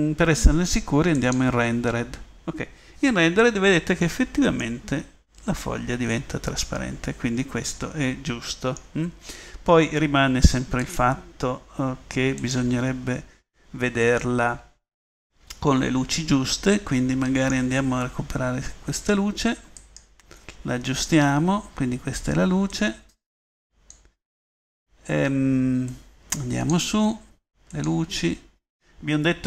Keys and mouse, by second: 14.1-16.9 middle drag, 20.6-24.8 middle drag, 25.9-28.0 middle drag.